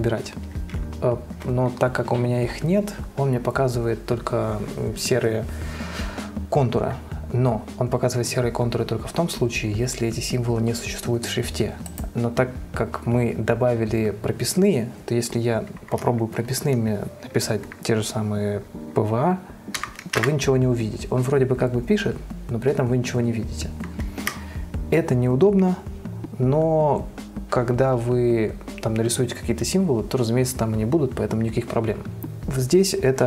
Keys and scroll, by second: 19.9-21.0 typing.